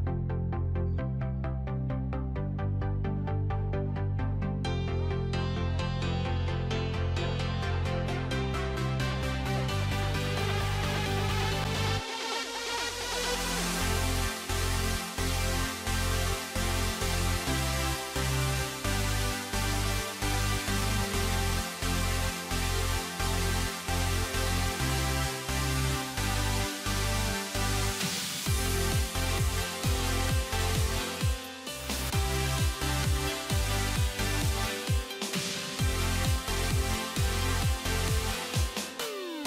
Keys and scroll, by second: 32.8 alt+x.